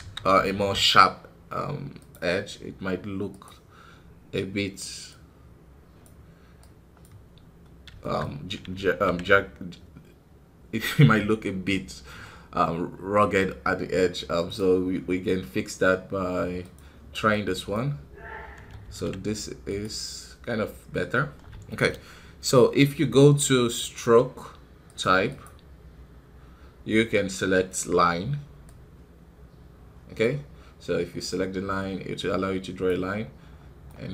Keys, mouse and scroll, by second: 0.5 f, 6.5 click, 7.3 scroll up 3, 7.9 shift+middle click, 8.2-8.8 scroll up 2, 8.8 ctrl+z, 17.2-18.3 drag, 18.3 scroll down 2, 18.8 ctrl+z, 21.3 scroll down 2, 21.6-32.8 shift+middle drag, 32.8 click, 33.4-33.8 scroll down 3, 33.8-34.1 middle drag.